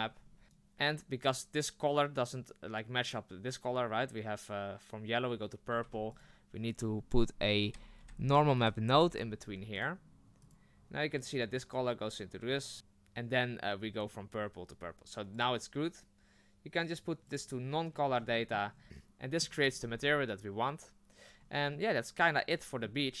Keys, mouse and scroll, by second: 0.1 scroll up 4, 0.4 Delete, 17.4-18.4 drag, 18.4-18.7 middle drag, 18.7-21.4 scroll up 6, 21.4 scroll down 2, 21.7-23.2 middle drag.